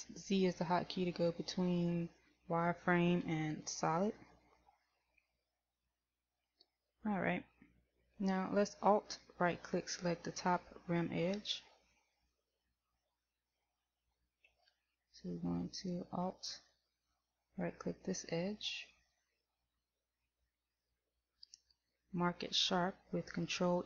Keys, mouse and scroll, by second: 14.7 a, 15.8 middle click, 17.8 alt+right click, 19.9 KP_1.